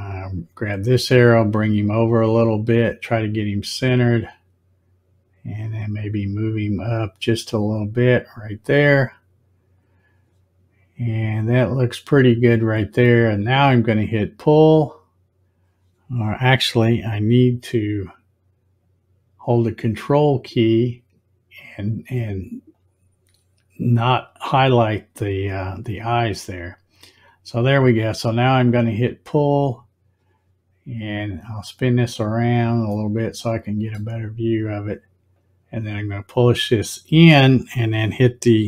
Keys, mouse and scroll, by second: 0.1-4.1 drag, 5.6-9.8 drag, 20.2 ctrl+click, 22.7 ctrl+click, 28.6 click, 31.3 click, 33.0-34.0 middle drag, 35.4-38.6 drag.